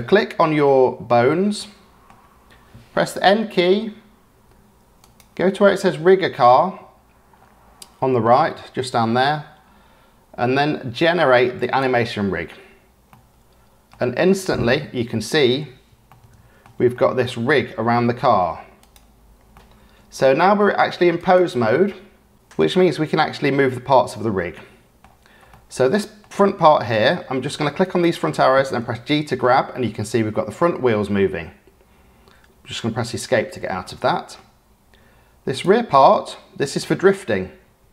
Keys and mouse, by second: 0.3-2.0 drag, 3.1 n, 5.1 click, 11.7 click, 13.1-13.9 drag, 14.0 middle click, 14.5 middle click, 16.0 shift+middle click, 16.9-18.2 middle drag, 18.7 click, 19.5 click, 21.2-22.3 drag, 23.6 click, 25.5 click, 27.9 click, 28.7 g, 33.8-34.3 drag, 35.9-36.8 drag, 37.6 g.